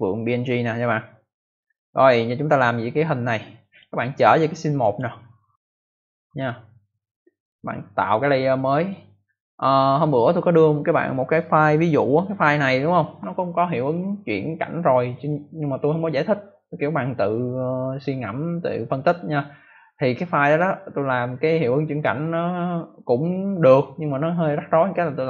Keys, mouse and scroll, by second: 3.5 click, 4.7 click, 6.2 click, 7.3 click, 8.7 click.